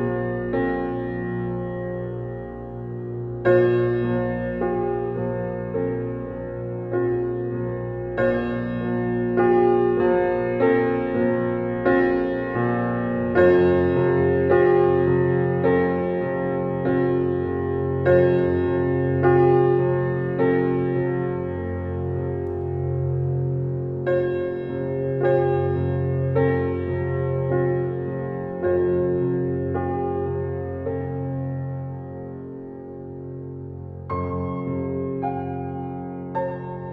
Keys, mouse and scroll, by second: 4.2-7.3 right drag, 7.3 click, 10.7 right click, 12.5 click, 14.0 shift+click, 16.1-19.4 right drag, 19.4 click, 22.7 right click, 23.8 click, 24.1 r, 24.8 click, 27.4 alt+right click, 28.2 click, 28.8 alt+click, 29.3 right click, 30.5 click, 31.4 scroll down 1, 34.0 r, 36.2 alt+middle click, 36.6 click.